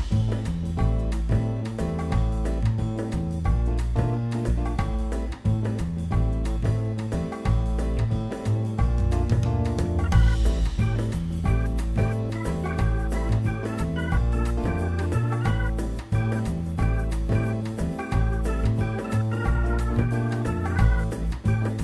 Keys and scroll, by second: 0.9 2, 1.1 Return, 1.1 0, 5.1 t, 5.2 w, 5.8 Return, 19.4 z.